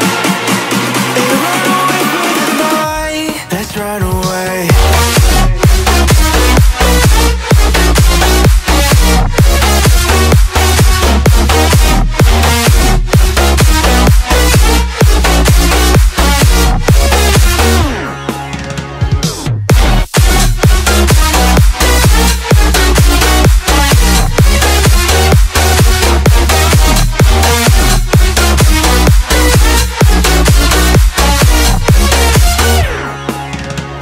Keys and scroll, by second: 1.6 space, 10.7 ctrl+shift+], 20.1 space.